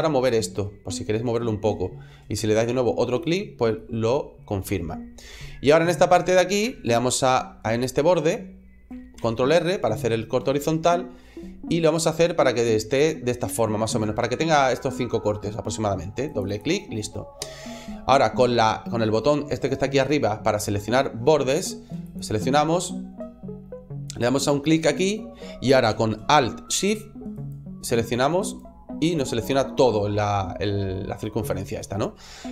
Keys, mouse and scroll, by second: 3.1 click, 3.6 middle click, 4.6 middle click, 9.0 ctrl+r, 16.4 click, 21.9 click, 23.9 right click, 27.2 alt+shift+right click, 28.3 alt+shift+right click.